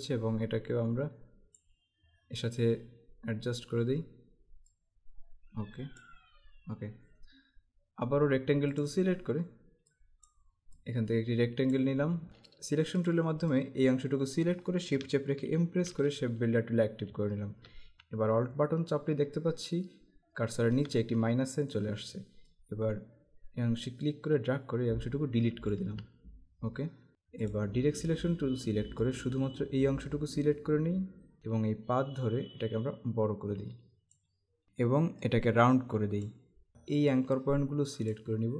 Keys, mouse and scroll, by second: 4.8 click, 8.9 click, 12.3 v, 13.0 click, 15.6 shift+m, 22.5 alt+click, 27.6 click, 29.1 click, 31.4 z, 32.3 click, 34.6 z, 35.3 click.